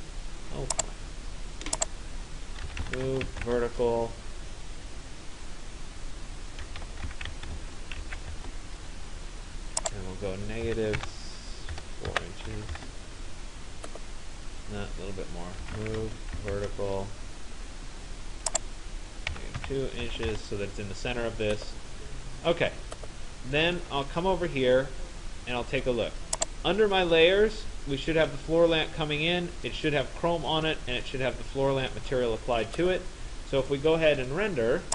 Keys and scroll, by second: 2.5 v, 3.0 e, 3.1 Return, 7.3 Return, 10.7 -, 11.1 6, 11.8 BackSpace, 12.2 4, 12.8 Return, 19.4 -, 19.6 2, 20.3 Return.